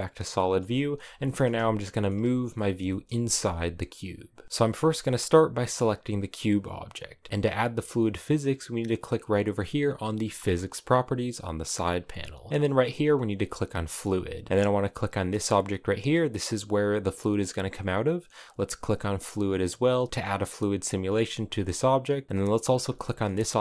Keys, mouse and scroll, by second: 0.0-1.2 middle drag, 1.2-1.7 scroll down 1, 1.7-4.4 shift+middle drag, 4.4 g, 5.6-7.3 scroll up 5, 13.4-14.5 drag, 14.5 right click, 18.9-22.3 drag, 22.3 right click, 22.8 shift+middle click, 23.0 scroll down 2, 23.3 middle click.